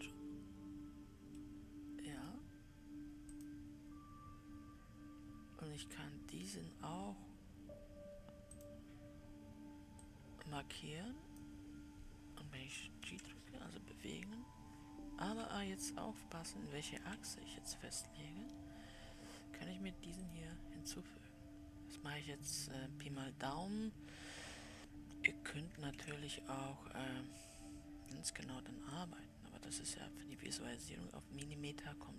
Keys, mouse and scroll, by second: 1.7-3.8 middle drag, 3.8-13.4 drag, 13.4 g, 20.9 x, 26.3 ctrl+d, 29.3-32.1 drag.